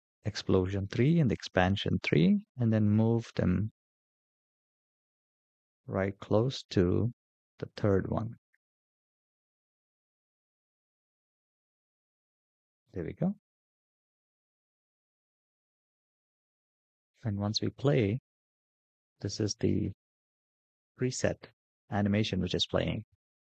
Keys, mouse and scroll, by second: 0.0 click, 0.8 ctrl+click, 2.2 g, 9.8-16.5 drag, 16.5 space.